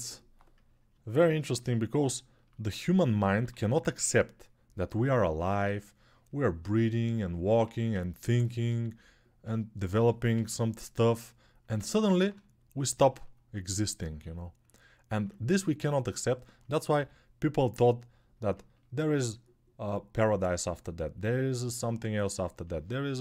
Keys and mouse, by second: 3.1 3, 7.1-11.9 alt+drag, 7.4 1, 9.7 g, 10.1 ], 10.2 ], 14.0 ctrl+alt+right click, 14.5-23.2 drag, 16.7 g.